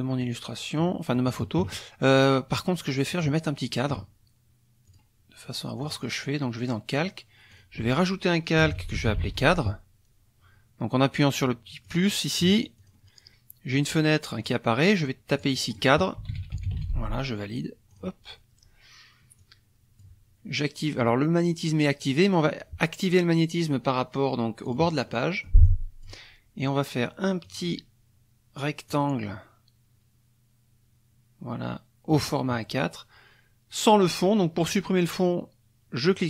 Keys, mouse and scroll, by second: 0.8 click, 2.5 click, 4.9 click, 5.8 click, 7.5 click, 8.4-9.8 typing, 11.9 click, 12.8 click, 13.7 click, 15.3 click, 15.9-17.2 typing, 17.9 click, 19.4 click, 24.7 click, 25.1-26.2 drag, 27.4 click, 28.9-32.3 drag, 36.1 click.